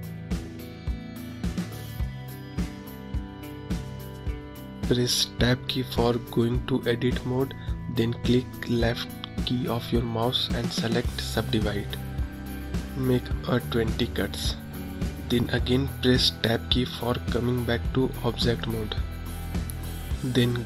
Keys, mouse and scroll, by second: 1.3-1.7 scroll up 1, 1.7-5.2 scroll down 3, 6.2 Tab, 6.9-8.8 right drag, 8.8-10.7 middle drag, 10.7-15.2 drag, 15.4 Tab, 16.4-17.0 scroll down 1, 17.0-19.5 middle drag, 19.5 click.